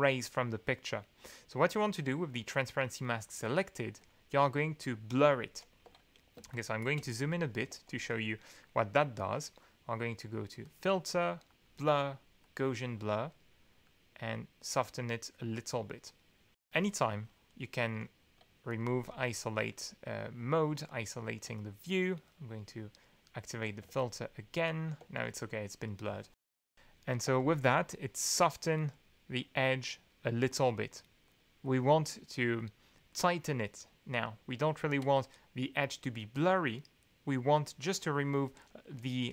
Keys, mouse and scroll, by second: 5.1 2, 5.8 1, 6.3 ctrl+space, 6.5 ctrl+click, 6.9 ctrl+click, 7.7 alt+2, 10.6 click, 12.6 drag, 13.8 click, 14.6 click, 15.3 click, 16.5-17.7 drag, 18.7 click, 19.1 alt+2, 20.8 click, 23.8 alt+2, 25.0 alt+2, 26.5 alt+2, 27.2 alt+2, 28.3-28.7 scroll up 2, 28.8-29.1 scroll up 2, 29.4 click, 29.8 click, 30.8 click, 31.2 click, 31.6 click, 32.1 click, 32.6 click, 38.9 click.